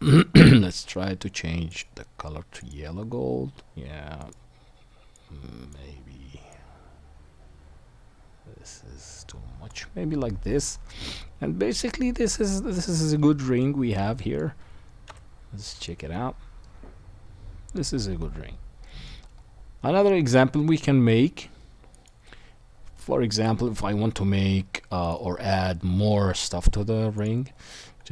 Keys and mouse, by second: 1.7 click, 1.7 middle click, 6.9 middle click, 7.5 right click, 7.9 middle click, 8.6 right click, 8.7 middle click, 9.6-12.9 right drag, 12.9-13.5 middle drag, 13.5 right click, 14.5 middle click, 15.1 KP_1, 15.1 right click, 15.4-17.0 middle drag, 17.0-17.4 right drag, 17.4 middle click, 17.9-18.4 right drag, 18.4-22.0 middle drag, 19.6-22.0 right drag, 22.0-27.2 middle drag, 22.0-27.2 right drag, 25.0 click.